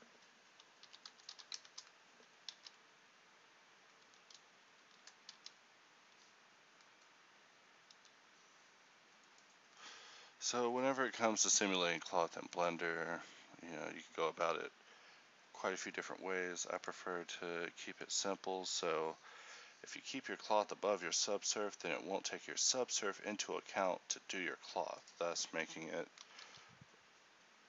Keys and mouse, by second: 2.7 alt+a, 4.2 Escape, 5.4 alt+a, 8.5 Escape, 26.6 alt+a.